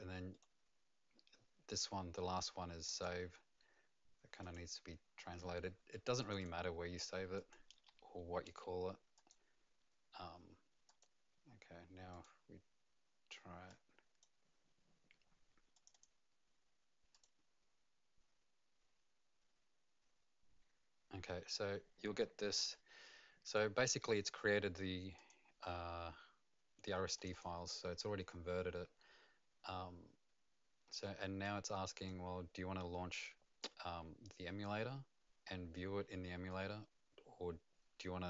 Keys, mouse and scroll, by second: 0.3 right click, 2.8 click, 4.4 click, 6.2 click, 6.4 click, 7.3 click, 8.5 a, 9.1 click, 10.9 click, 12.2 click, 13.5-14.3 typing, 13.8 click, 16.0 click, 17.1 click, 25.2 click, 27.1 click, 31.4 click.